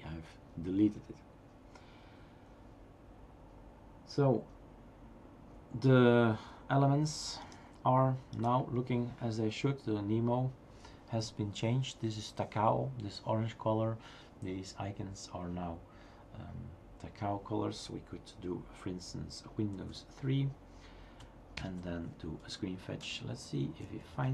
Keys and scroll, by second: 19.8 super+", 21.7 super+Return, 22.4 typing, 23.6-24.3 typing.